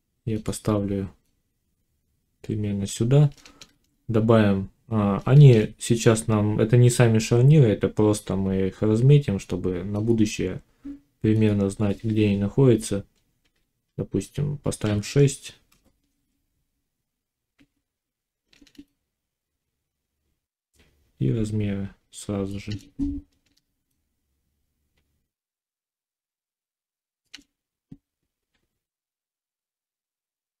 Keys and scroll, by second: 3.5 shift+a, 5.2 shift+a, 14.7 6, 15.5 Return.